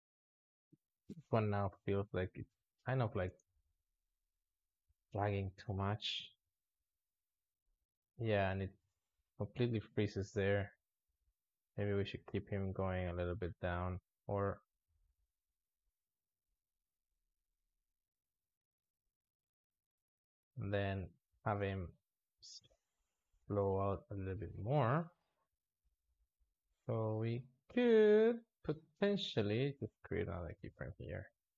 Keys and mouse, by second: 3.0 space, 3.3 alt+shift+z, 3.8-4.1 drag, 5.0-6.7 ctrl+middle drag, 6.7-7.8 drag, 11.5-14.5 drag, 15.7-18.7 drag, 20.8 click, 21.5 click, 22.1 s, 24.3 click, 25.1 click, 27.2 click, 30.2 shift+d.